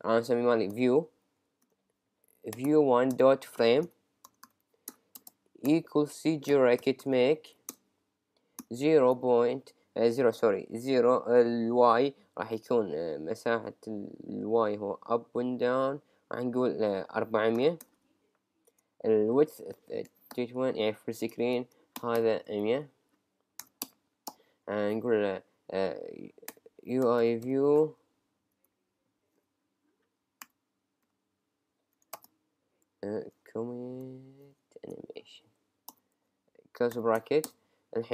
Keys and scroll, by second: 0.7 shift+g, 3.2 Return, 7.7 Return, 9.0 Tab, 18.7 Tab, 22.9 Right, 23.8 Return, 26.6 Return, 27.0 shift+u, 27.4 shift+v, 27.7 shift+e, 35.1 Down, 35.9 Return, 36.2 Right, 37.5 Return.